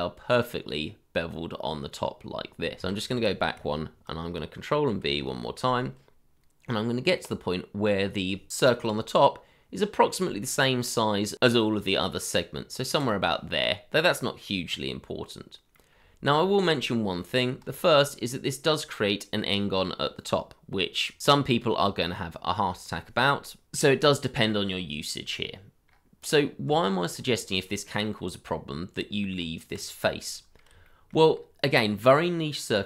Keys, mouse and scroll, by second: 1.7 scroll down 1, 2.3 ctrl+z, 4.5 scroll up 1, 5.0 ctrl+b, 13.4-14.0 scroll down 1, 14.0 middle click, 15.9 scroll up 1, 16.6-17.3 shift+scroll up 1, 17.3 middle click, 17.7 shift+middle click, 18.5 scroll up 1, 24.6 scroll down 1, 25.8-26.6 scroll up 1, 26.6 Tab, 27.7-28.0 scroll down 1, 28.3 middle click, 29.4 Tab, 29.9-30.9 scroll down 1, 30.9 shift+middle click, 31.3-32.2 scroll up 1, 32.2 middle click.